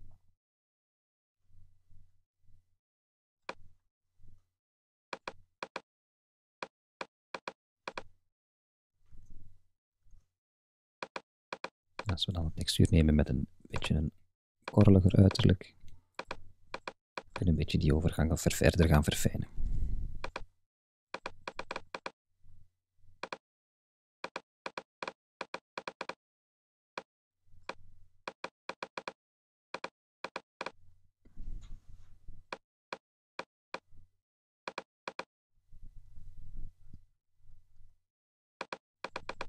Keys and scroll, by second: 9.1 super+z.